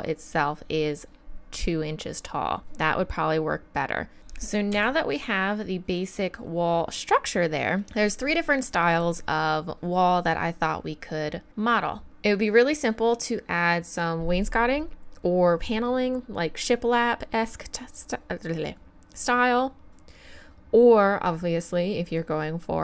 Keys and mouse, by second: 4.7 z, 5.0 middle click, 6.4-7.8 middle drag.